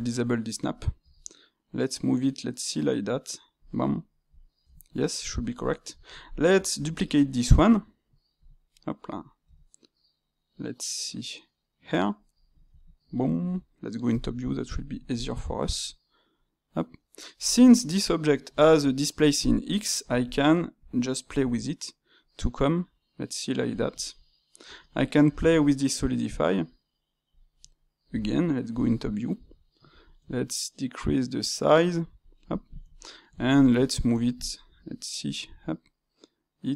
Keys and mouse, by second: 1.1 g, 3.8 middle click, 4.6 Tab, 5.3-5.6 drag, 5.6-6.8 ctrl+middle drag, 6.8 shift+d, 8.6-9.4 middle drag, 9.4 g, 12.4-14.0 middle drag, 14.0 KP_7, 14.6-15.6 ctrl+middle drag, 15.6 g, 19.5-20.4 middle drag, 20.4 space, 27.5-28.6 middle drag, 28.6 KP_7, 33.0-34.6 ctrl+middle drag, 35.2 g.